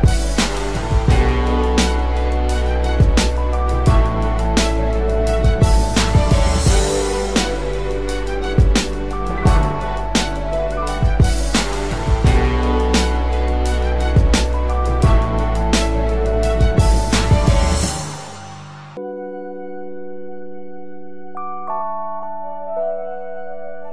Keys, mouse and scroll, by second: 15.8 ctrl+t, 17.0 alt+shift+click, 22.5 alt+shift+click.